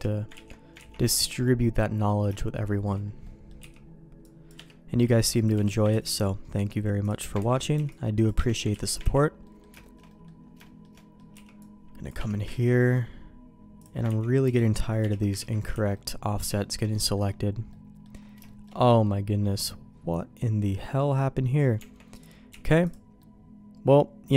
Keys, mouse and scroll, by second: 0.3 ctrl+q, 0.8 ctrl+x, 1.0 middle click, 2.2 shift+middle click, 2.7 shift+middle click, 3.2 middle click, 3.6 c, 5.2 c, 5.9 ctrl+q, 7.0 click, 7.5 ctrl+x, 7.7 c, 8.7 ctrl+q, 9.1 ctrl+x, 9.4 middle click, 9.8 shift+middle click, 10.1 middle click, 10.6 shift+middle click, 10.9 middle click, 11.3 c, 12.6 ctrl+q, 13.8 click, 14.1 ctrl+x, 14.4 c, 15.4 ctrl+q, 15.7 ctrl+x, 15.9 middle click, 16.6 shift+middle click, 16.9 middle click, 17.7 middle click, 18.4 shift+middle click, 19.1-21.0 middle drag, 21.8 Tab, 22.1 click, 22.5 x, 23.2-24.3 middle drag.